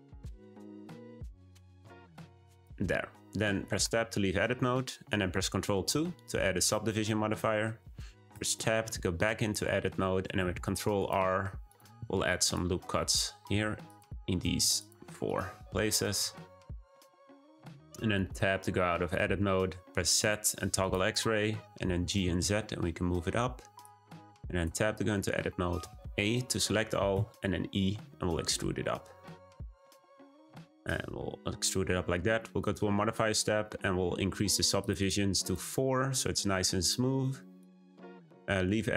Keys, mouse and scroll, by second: 0.7 click, 1.0 g, 3.8 Tab, 5.8 ctrl+2, 8.3 Tab, 11.6 r, 12.0 r, 13.5 r, 14.5 r, 16.9-17.9 middle drag, 17.9 Tab, 19.9 z, 21.9 g, 24.6 Tab, 25.1 shift+middle click, 25.7 a, 27.1 e, 32.5 click, 34.7-36.4 drag, 36.4-36.7 scroll up 1, 36.7-37.6 right drag, 37.8 Tab.